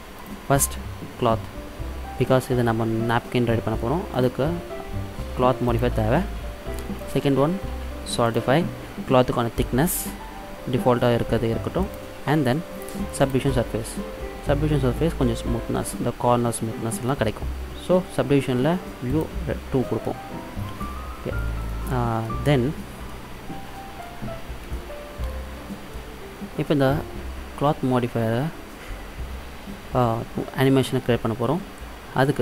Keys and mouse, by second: 2.1 middle click, 4.2-6.1 drag, 7.0-8.8 drag, 11.9-13.7 drag, 14.5-19.2 middle drag, 19.2-20.8 drag, 21.7 middle click, 22.5-23.5 middle drag.